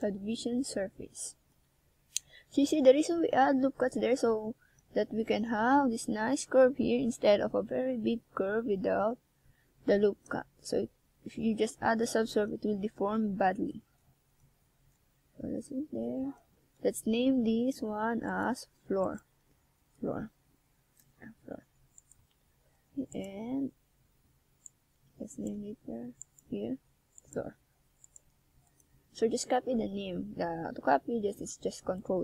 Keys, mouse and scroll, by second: 1.3-2.2 scroll up 1, 2.2-2.8 shift+scroll down 2, 2.8 scroll up 1, 3.3 Tab, 4.3 right click, 6.1 shift+right click, 6.7 right click, 8.8 right click, 10.7 shift+right click, 11.4 shift+right click, 13.1 x, 16.2 right click, 27.0 click, 27.4 click, 27.8 click, 29.8 shift+s.